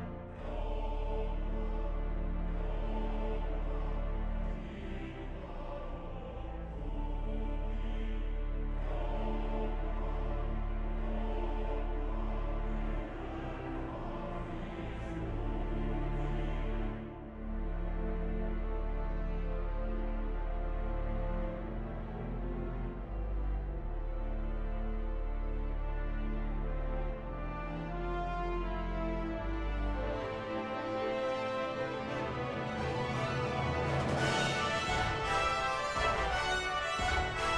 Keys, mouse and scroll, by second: 9.6 ctrl+-, 10.3 ctrl++, 19.7 ctrl+-, 19.8 ctrl++, 26.1 ctrl+-, 27.0 ctrl++, 29.9 ctrl+-.